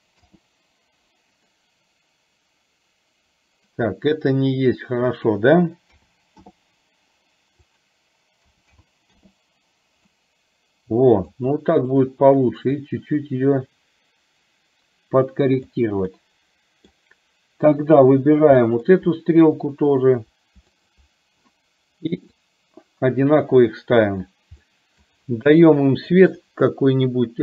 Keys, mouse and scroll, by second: 1.6-3.7 middle drag, 5.1-6.7 drag, 7.7-9.4 drag, 10.1-11.4 middle drag, 12.8-15.7 drag, 16.3 middle click, 18.7-19.1 middle drag, 20.8 shift+click, 22.6 click, 24.7-25.1 middle drag, 26.2 click.